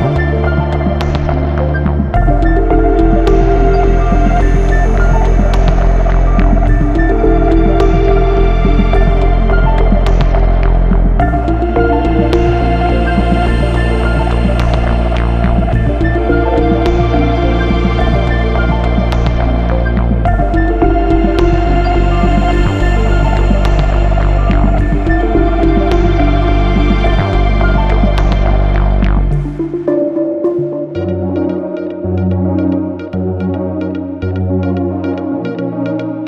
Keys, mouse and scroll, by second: 0.6 click, 4.8 click, 5.3 ctrl+o, 6.6-7.5 scroll up 1, 7.5 click, 9.1 click, 13.4 click, 14.7 F4, 16.2 F9, 17.9 click, 19.1 ctrl+o, 20.3 click, 21.2 click, 25.0 click, 25.5 click, 26.2 F4, 28.1 F9, 29.7 click, 33.8 click, 34.7 click.